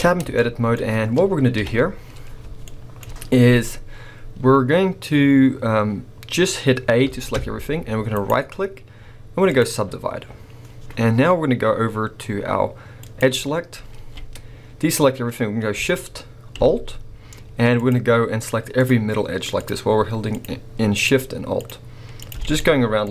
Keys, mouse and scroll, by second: 0.4 shift+middle click, 0.8-1.6 scroll up 1, 1.6 KP_7, 2.6 shift+middle click, 4.5 scroll up 1, 7.1 a, 8.1-13.0 right drag, 13.0 click, 13.9 alt+a, 14.9 scroll up 2, 17.7 alt+shift+click, 19.6 alt+shift+click, 21.6 alt+shift+click, 22.2 alt+shift+click, 22.6 shift+middle click.